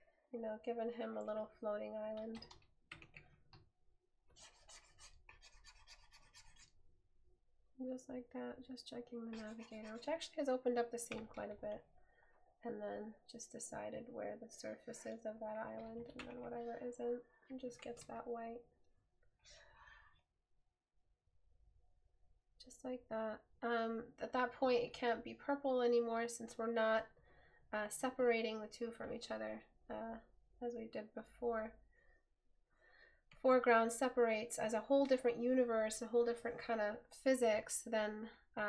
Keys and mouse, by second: 24.9 right click.